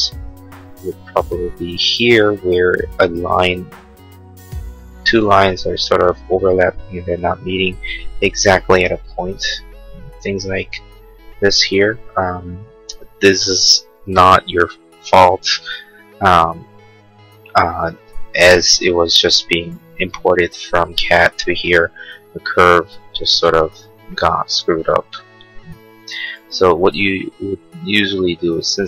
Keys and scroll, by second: 18.6 l, 27.1 Escape.